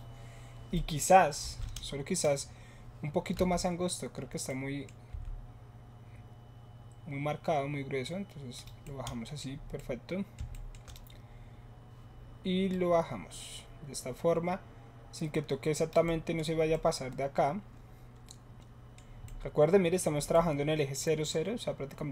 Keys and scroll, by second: 3.4 s.